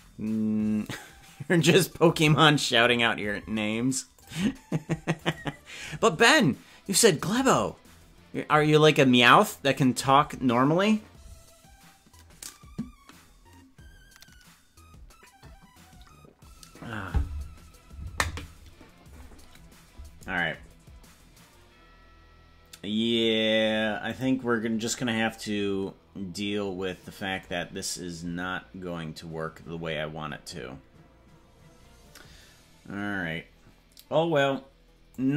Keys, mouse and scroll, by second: 24.1 click, 35.1-35.3 drag.